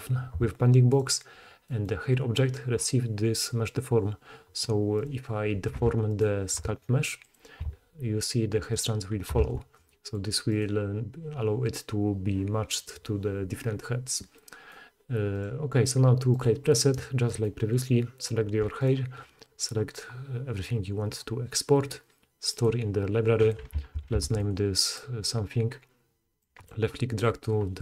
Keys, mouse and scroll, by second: 1.0-8.8 drag, 5.0 middle click, 5.0 right click, 5.8 Tab, 6.0-7.3 middle drag, 6.0-7.3 right drag, 7.6 g, 8.8-10.4 middle drag, 9.4 Tab, 10.4 click, 10.6-15.3 middle drag, 15.3 click, 15.4-16.3 middle drag, 16.3 click, 16.4-18.8 middle drag, 18.8-22.6 shift+middle drag, 22.6-25.0 drag, 23.9 shift+a.